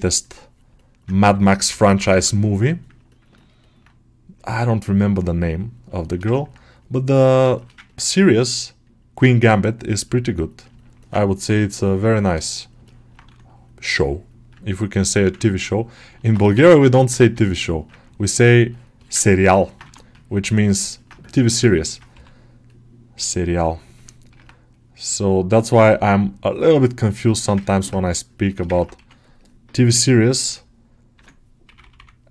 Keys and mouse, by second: 0.6 middle click, 1.1 g, 1.5 ], 1.7 ], 2.5 middle click, 3.2 ctrl+alt+middle click, 3.5 alt+middle click, 4.2 middle click, 5.9 alt+shift+middle click, 6.2 ctrl+alt+middle click, 7.1 ctrl+middle click, 7.4 shift+middle click, 8.3-10.8 middle drag, 10.9 middle click, 11.6 click, 12.7 middle click, 13.1 1, 13.3-16.0 drag, 16.0 middle click, 16.4 g, 17.1 1, 17.9 ctrl+click, 18.2 ctrl+click, 18.6 ctrl+middle click, 18.8 middle click, 19.1 ctrl+middle click, 19.4 alt+middle click, 20.8 middle click, 21.1 shift+click, 21.5 alt+shift+middle click, 22.0 g, 22.5 click, 23.8 ctrl+middle click, 25.7-27.2 drag, 27.2 shift+middle click, 27.5 ctrl+alt+middle click, 28.3 alt+shift+middle click, 28.6 ctrl+alt+middle click, 31.0 2, 31.5 [, 31.7 [, 32.2-32.3 middle drag.